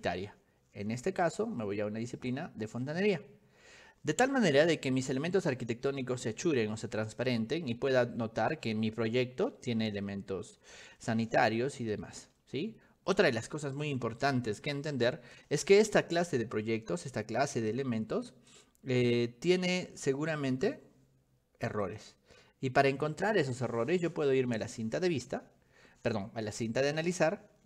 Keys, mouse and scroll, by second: 1.1 click, 2.4 click, 5.0-7.5 shift+middle drag, 8.2 middle click, 8.9 shift+middle click, 9.9 middle click, 10.2 middle click, 10.7 middle click, 11.3 middle click, 11.7 middle click, 12.5-13.5 middle drag, 18.6 click, 20.6 click, 21.9 click, 25.0 click, 27.0 click.